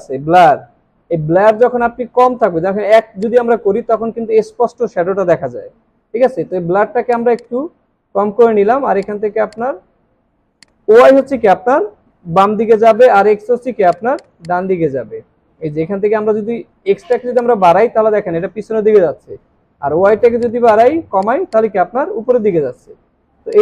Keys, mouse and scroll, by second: 3.3 double click, 7.3 double click, 14.1 double click, 20.6 double click.